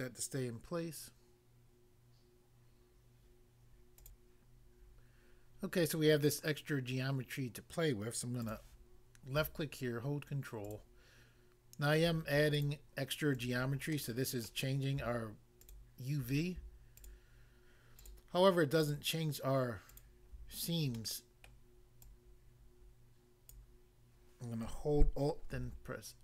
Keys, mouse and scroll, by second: 4.0 click, 4.2 click, 8.4 click, 10.7 ctrl+click, 12.6 shift+click, 13.4 shift+click, 14.0 middle click, 14.5 middle click, 15.7 shift+click, 15.9 shift+click, 17.0 shift+click, 17.0 shift+click, 18.0 ctrl+click, 18.8 ctrl+click, 18.9 ctrl+click, 19.9 ctrl+click, 20.9 middle click, 21.5 middle click, 22.0 click, 23.5 click, 25.5 alt+s.